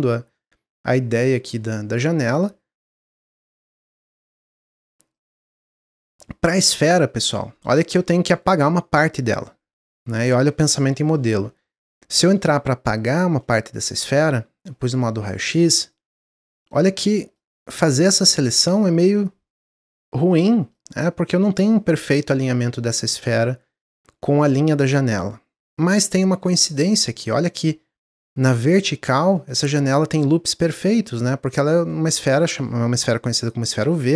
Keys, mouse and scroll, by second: 2.8-4.2 middle drag, 4.2-4.6 scroll down 2, 4.7 Tab, 5.1 click, 6.2-7.4 middle drag, 7.4 scroll up 1, 7.8-8.4 middle drag, 8.4-8.7 scroll up 1, 13.0 click, 13.3-15.0 middle drag, 15.0 Tab, 15.2-16.7 middle drag, 16.7 click, 17.5-19.1 middle drag, 19.1 click, 19.8 middle click, 20.7-26.0 drag, 26.0-28.2 middle drag, 28.2 click, 29.3 middle click, 30.1-31.8 drag, 31.8-34.1 middle drag.